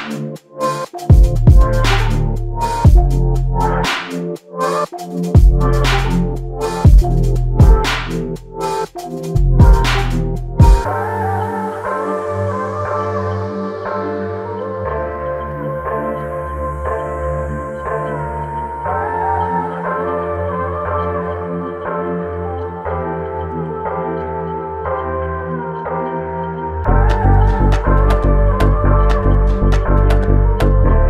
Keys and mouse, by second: 0.2 f, 3.0 double click, 5.7 alt+click, 7.0 double click, 9.8 alt+click, 11.3 double click, 14.1 alt+click, 16.4 double click, 21.2 double click, 21.5 shift+click, 25.9 r.